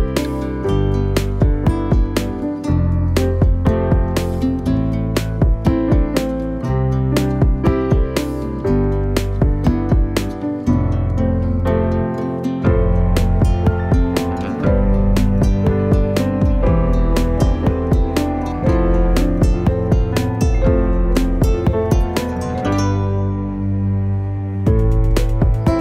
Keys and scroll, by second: 3.9-5.0 typing, 9.0-10.1 typing.